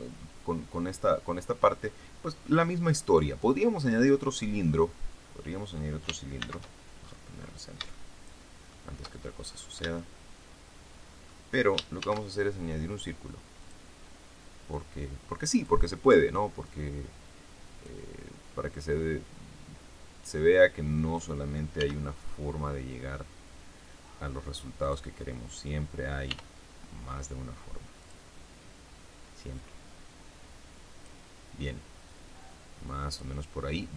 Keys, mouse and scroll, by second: 3.0-3.4 scroll down 1, 3.6 scroll down 1, 3.7-4.1 scroll up 1, 4.5-5.3 scroll down 4, 6.3 shift+c, 6.9 shift+scroll up 3, 7.2 scroll down 2, 7.3 scroll up 2, 7.5 scroll down 2, 7.8 shift+middle click, 8.6-9.7 shift+scroll up 3, 9.9-10.9 shift+middle drag, 10.9 shift+scroll up 1, 11.9 shift+a, 13.5 click, 14.6-15.7 drag, 16.5-17.9 drag, 18.7-21.3 drag, 21.7 s, 24.7 click, 26.2 r, 27.9 click, 29.5-31.1 drag, 31.9-33.3 drag.